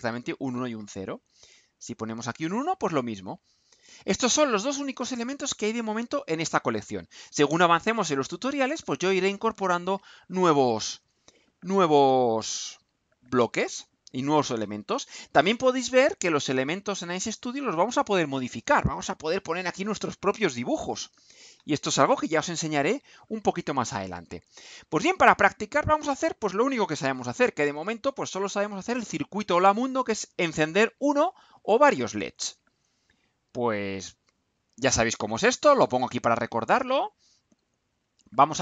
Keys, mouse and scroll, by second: 1.8 click, 3.6 click, 35.9 click.